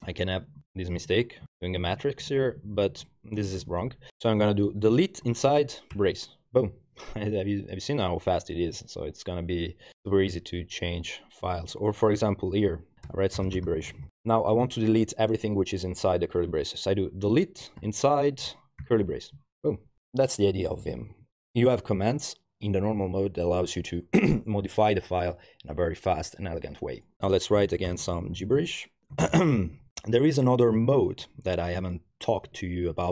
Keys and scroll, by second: 0.1 BackSpace, 0.2 BackSpace, 0.4 Right, 1.5 alt+e, 1.5 typing, 1.8 alt+Left, 2.4 Left, 2.8 Left, 2.9 Left, 3.5 Left, 3.6 Left, 4.4 Home, 4.9-6.5 typing, 11.5 Down, 11.6 Down, 13.1-14.6 typing, 17.3 d, 17.8 i, 18.8 alt+shift+e, 27.3 Return, 27.4-30.2 typing, 30.9 Page_Up, 31.1 Page_Up, 31.4 Page_Up, 32.5 o, 32.9 Escape.